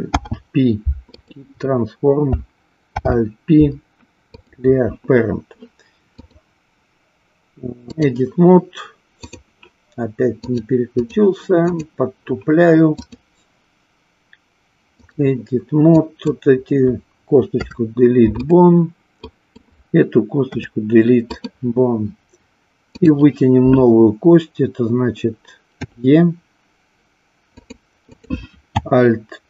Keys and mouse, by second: 0.1 alt+p, 6.2-8.3 drag, 10.3 click, 11.5 click, 13.0-15.2 drag, 16.0 click, 17.5 Delete, 19.3 click, 22.9 click, 25.8 e.